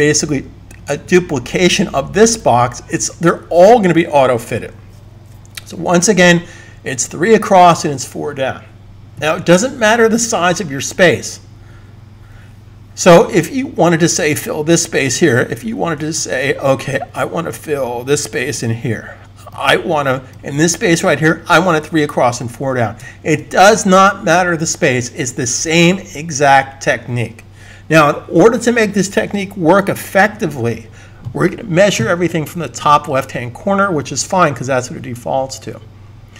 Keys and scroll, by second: 18.0 v, 23.1 super+z.